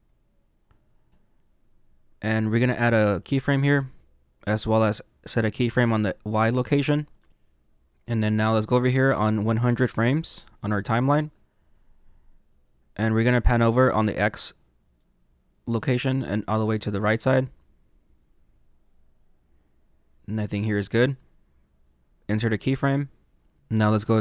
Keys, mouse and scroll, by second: 3.6 click, 7.1 click, 10.3 click, 15.1 click, 22.2 click.